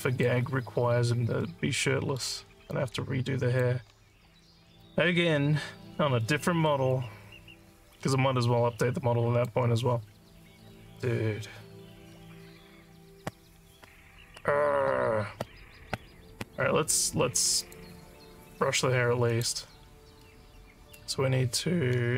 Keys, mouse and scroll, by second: 1.4 alt+middle click, 2.7 alt+click, 6.2 alt+middle click, 6.9-9.4 alt+drag, 17.6 click, 19.3 click.